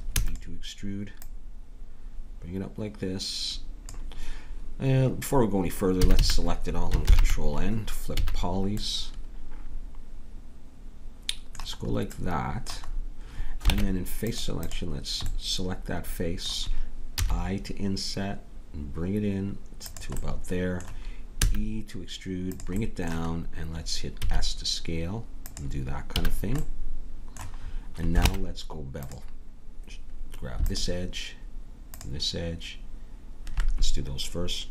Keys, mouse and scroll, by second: 0.1 e, 1.3-3.1 drag, 6.0 a, 6.1 a, 7.0 ctrl+n, 8.2 a, 8.8-10.1 middle drag, 13.7 ctrl+Tab, 17.2 i, 20.3-21.3 middle drag, 21.3 e, 22.8 middle click, 24.2 s, 26.2 a, 28.3 ctrl+Tab, 30.7-34.7 drag.